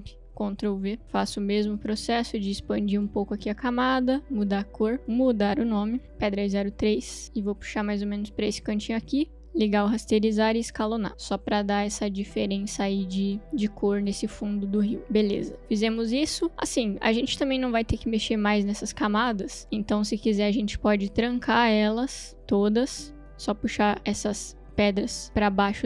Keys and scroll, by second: 5.3 Return, 10.6 s, 18.3 s.